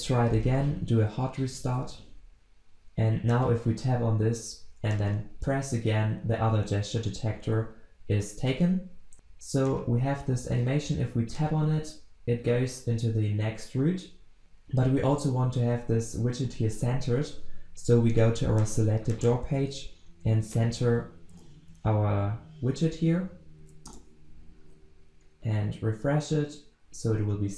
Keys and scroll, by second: 1.4 ctrl+shift+\, 21.4 alt+Return, 25.0 ctrl+s.